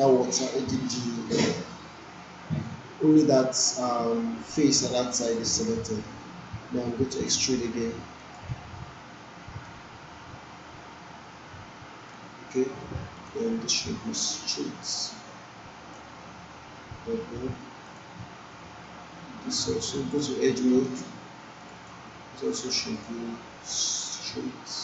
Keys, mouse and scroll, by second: 8.2-12.2 drag, 19.8-21.1 right click, 21.6-24.8 drag.